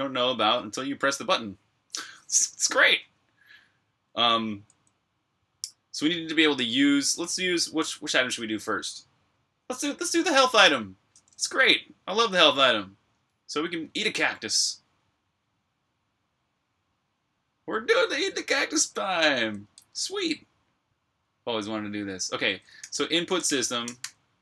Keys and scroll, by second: 22.4-24.3 typing.